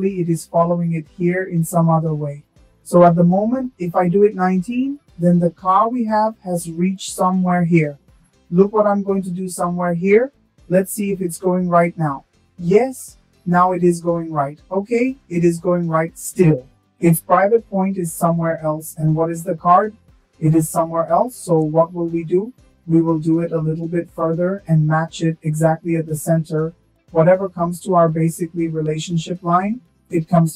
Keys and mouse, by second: 3.4-5.4 drag, 8.8 shift+drag, 11.7 click, 14.0-20.4 drag, 22.3 shift+middle click, 24.0 click.